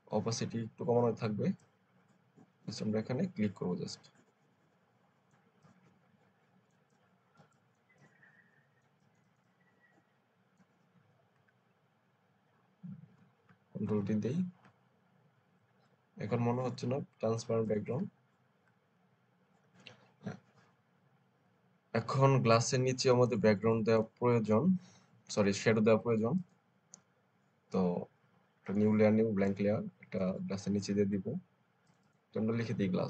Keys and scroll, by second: 13.7 ctrl+alt+d, 23.0 alt+space, 24.2 alt+space.